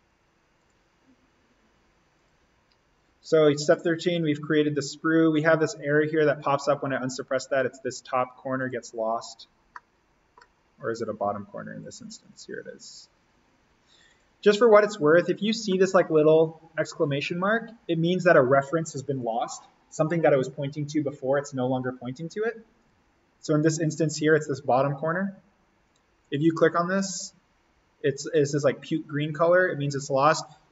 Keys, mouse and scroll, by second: 9.1-9.6 scroll down 1, 9.7 middle click, 10.5 scroll up 1, 12.1 click, 14.5-15.2 scroll down 1, 22.7 click, 23.1-25.4 scroll down 1, 26.1 click.